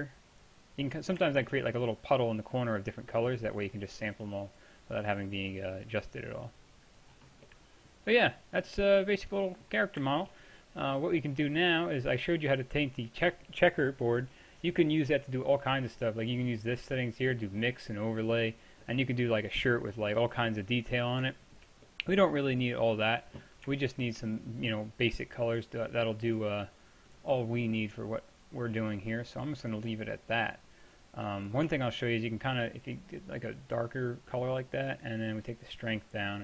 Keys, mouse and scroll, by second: 7.3-7.8 middle drag, 8.0-8.5 drag, 8.5-12.0 middle drag, 15.4-16.3 middle drag, 16.3-18.7 drag, 18.9-25.6 middle drag, 25.6-29.4 drag, 33.5-36.4 drag.